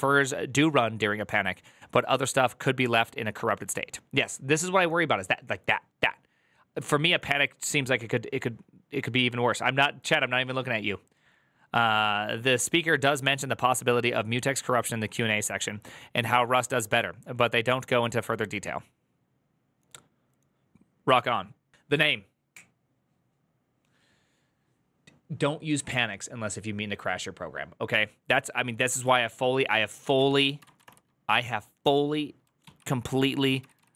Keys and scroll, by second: 30.9-31.6 typing, 32.6 ctrl+p, 33.2-33.9 typing.